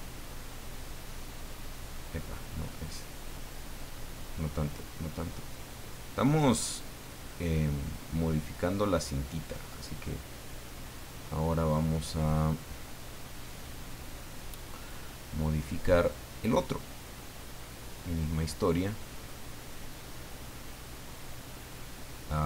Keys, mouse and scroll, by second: 5.5-8.6 drag, 9.5 right click, 11.2 scroll up 1, 14.8 click, 16.0 click, 19.4-22.4 drag.